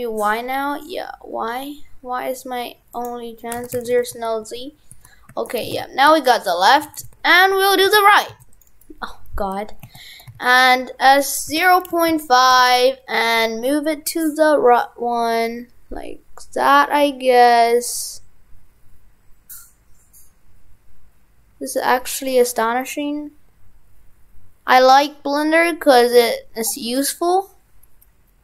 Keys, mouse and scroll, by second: 3.6 shift+f, 6.5 right click, 6.6 right click, 6.8 shift+f, 8.7 right click, 8.9 right click.